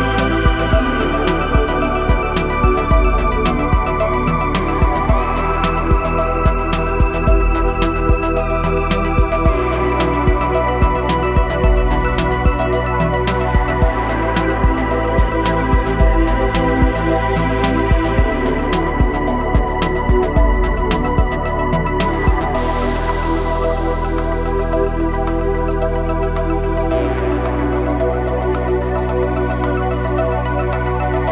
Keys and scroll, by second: 0.4 KP_9, 1.4 Return, 29.1 r, 31.1 KP_9.